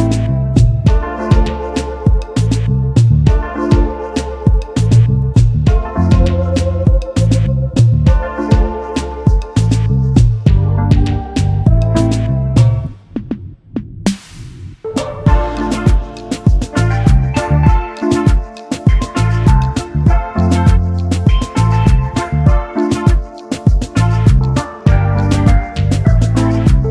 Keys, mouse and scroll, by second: 0.3 space, 2.1 Right, 2.3 Right, 4.2 Right, 4.3 Left, 8.9 alt+scroll down 1, 9.4 double click, 10.1 alt+scroll down 1, 11.0 double click, 11.4 space, 14.9 space, 14.9 double click, 15.2 space, 15.8 alt+scroll down 1, 16.2 space, 18.4 alt+scroll up 1, 19.0 right click, 21.1 double click, 22.1 double click, 23.6 shift+click, 24.8 alt+scroll up 1, 26.3 shift+click.